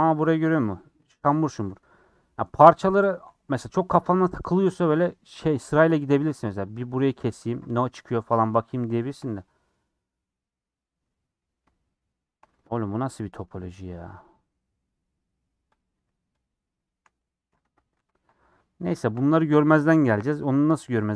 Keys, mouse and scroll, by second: 0.6 click, 1.1-3.1 shift+middle drag, 3.1 click, 3.4 scroll up 1, 3.7 shift+middle click, 3.9-4.7 scroll up 2, 5.1 click, 6.7 ctrl+click, 7.6-10.0 middle drag, 10.0 scroll up 2, 10.3-12.3 middle drag, 12.3-12.6 scroll up 1, 12.6 3, 12.9 click, 13.8 x, 14.0 middle click, 14.4-14.8 scroll up 2, 14.8 middle click, 15.7 click, 15.9 x, 17.7 ctrl+z, 17.9 ctrl+z, 18.5 scroll down 4, 18.7 middle click, 19.2-20.1 scroll up 1, 20.1 KP_1.